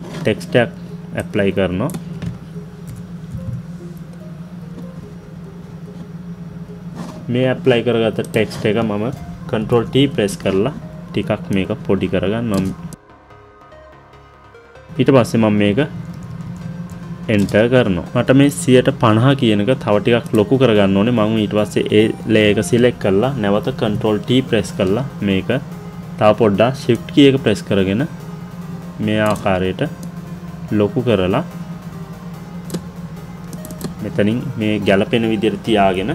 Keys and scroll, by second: 17.3 Return.